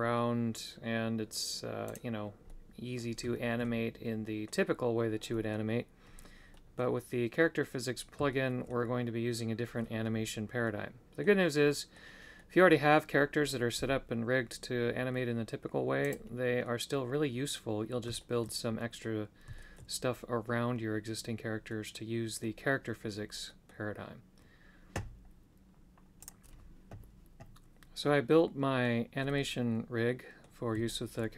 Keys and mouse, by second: 1.9 right click, 2.5 middle click, 3.4 shift+middle click, 4.2 middle click, 5.3 middle click, 6.5 middle click, 8.3 shift+middle click, 10.6 middle click, 11.7 middle click, 12.3 middle click, 16.0 right click, 16.7 middle click, 18.2 shift+middle click, 18.8 middle click, 19.5 shift+middle click, 21.7 middle click, 23.4 middle click, 28.0 middle click, 29.2-30.5 middle drag, 30.8 shift+middle click.